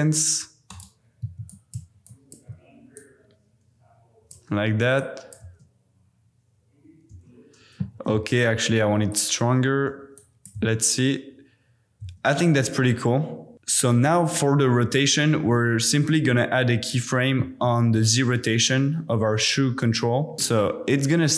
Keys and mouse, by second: 1.7 click, 2.2 shift+click, 2.9 click, 4.9-5.3 drag, 5.5 space, 7.1 space, 7.9 g, 8.1 x, 9.1 click, 10.5 space, 12.0 space, 15.9-16.9 drag.